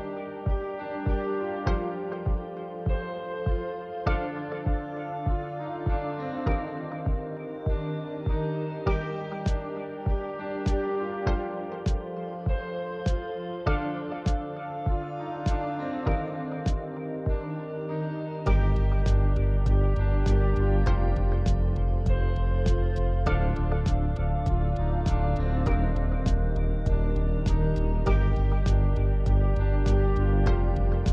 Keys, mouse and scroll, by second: 1.9 click, 4.7 click, 11.5 g, 14.7 middle click, 15.2 click, 15.5-17.6 middle drag, 17.7 a, 19.2 click, 19.8-21.7 middle drag, 21.7-22.1 drag, 22.4 click, 23.6 click, 23.9 middle click, 24.7 click, 25.1 scroll up 1, 25.4-26.9 middle drag, 27.0-28.8 drag, 28.8-30.5 drag.